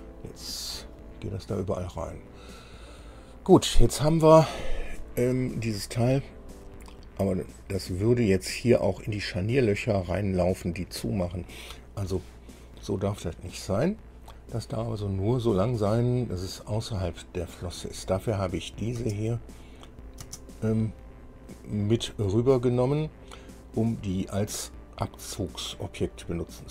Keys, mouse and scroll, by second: 0.1 shift+click, 1.2 click, 6.5-7.0 scroll up 2, 7.6-8.0 scroll down 2, 9.2 scroll up 2, 10.0-10.3 scroll up 2, 11.0 scroll down 2, 18.8 click, 19.2 space, 20.1 click, 20.4 space, 21.5 scroll down 2, 22.8-24.8 middle drag, 26.0 scroll down 2.